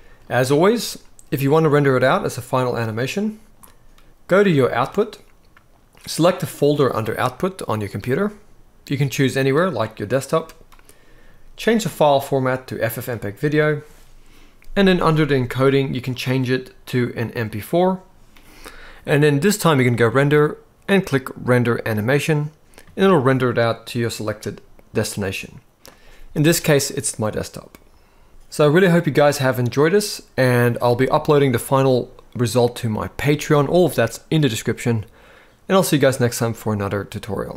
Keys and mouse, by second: 2.6 click, 4.4 click, 11.7-12.7 drag, 14.5 click, 15.9-17.4 drag, 19.6-22.4 drag.